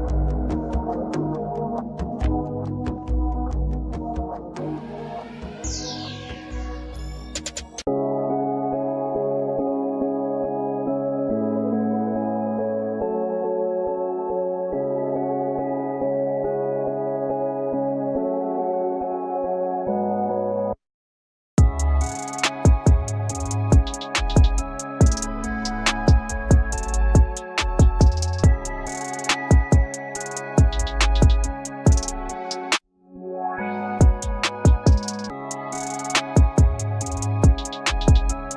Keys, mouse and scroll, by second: 0.4 alt+click, 1.3 alt+click, 6.4 double click, 9.5 double click, 11.2 double click, 13.3-14.0 alt+scroll up 1, 14.0 alt+click, 19.3 double click, 20.7-21.0 alt+scroll up 1, 21.7 alt+scroll down 1, 21.8 scroll up 1, 22.0-22.7 scroll down 1, 22.8 scroll up 1, 22.9 shift+click, 23.3 scroll down 1, 23.6 scroll up 1, 23.8 shift+click, 24.1 double click, 24.8 double click, 25.8 double click, 27.7-28.5 scroll down 2, 31.3 double click, 31.9 scroll down 1, 32.6 shift+click, 33.4-33.7 scroll down 1, 34.5 alt+click, 36.0-36.4 alt+scroll down 2.